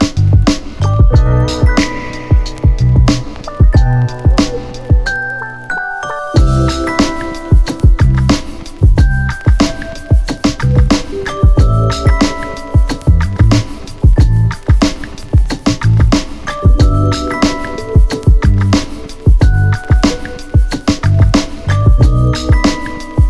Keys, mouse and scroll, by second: 1.0 Return, 2.6 click, 4.8 u, 6.3-9.8 click, 12.3 click, 14.2 Return, 19.2-23.2 click.